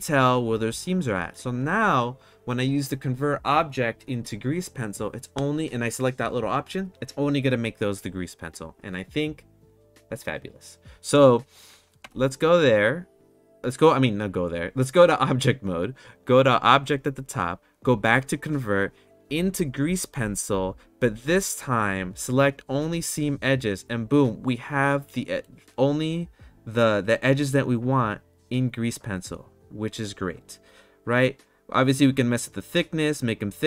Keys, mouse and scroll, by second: 12.0 Tab, 16.6-17.9 drag, 18.0-20.5 drag, 23.2 click, 24.8-25.4 middle drag, 32.2-33.6 drag.